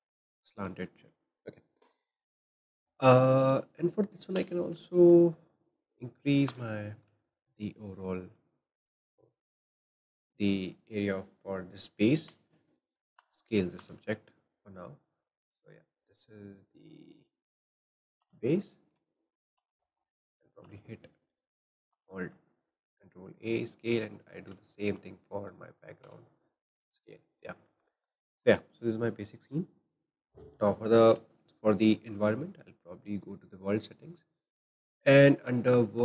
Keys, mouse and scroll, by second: 0.3 scroll down 3, 0.5-3.4 shift+middle drag, 3.4 click, 3.9-4.4 scroll up 1, 4.4 Tab, 4.8-6.5 shift+middle drag, 6.5 a, 6.8-7.2 scroll up 4, 7.8 shift+middle click, 7.8-8.6 scroll up 3, 8.6-12.4 shift+middle drag, 12.3 alt+s, 13.0 s, 13.3 g, 18.3 Tab, 18.6 click, 18.8 scroll down 2, 19.6 ctrl+a, 19.6 shift+middle click, 20.7 ctrl+a, 21.2 ctrl+a, 21.7 click, 23.5 ctrl+a, 24.0 click, 24.5 scroll down 3, 25.1 shift+middle click, 25.4 scroll down 1, 25.5 click, 26.3 ctrl+a, 27.3-27.8 scroll down 2, 27.8 shift+middle click, 28.0 click, 28.3-31.7 shift+middle drag, 31.7-34.2 drag, 34.2-34.6 scroll up 3, 34.6 shift+middle click, 35.2-36.0 scroll up 1.